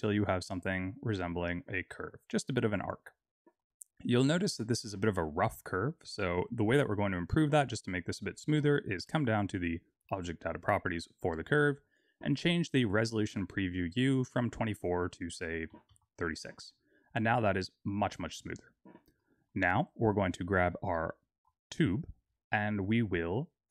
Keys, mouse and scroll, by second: 6.9 Tab, 10.1 click, 13.4 click, 18.3 click, 19.1 middle click, 19.8 click, 20.9 z.